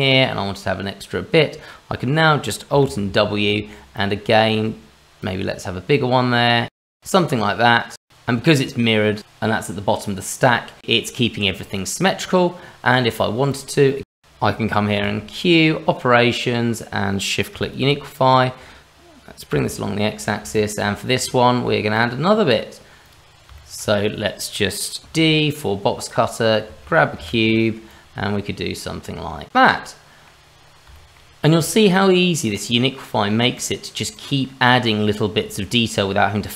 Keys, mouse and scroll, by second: 0.0 click, 2.8 alt+w, 3.9 click, 7.6 click, 11.5-12.0 scroll down 1, 12.0 scroll up 1, 12.1 middle click, 12.7 scroll down 1, 12.9 middle click, 13.5 click, 13.8 click, 14.0 shift+middle click, 14.2 alt+w, 15.0 q, 20.5 shift+middle click, 20.9-21.9 scroll up 2, 21.9 click, 23.0 click, 23.5 shift+middle click, 25.0 d, 27.9 click, 29.5 click, 29.7 middle click, 30.5-30.8 scroll down 2, 30.9 shift+middle click, 31.6 middle click, 32.4 middle click, 33.5 click, 34.1 middle click.